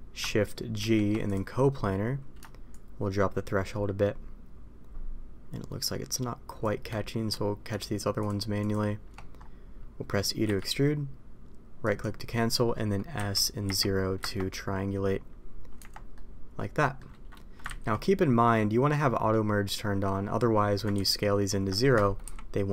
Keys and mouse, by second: 0.7 shift+g, 2.7-6.5 shift+drag, 8.1 shift+click, 8.5 shift+click, 10.4 e, 13.1 s, 15.7 Tab, 16.1-16.9 middle drag, 17.9 ctrl+z, 20.9 ctrl+z, 22.2 s.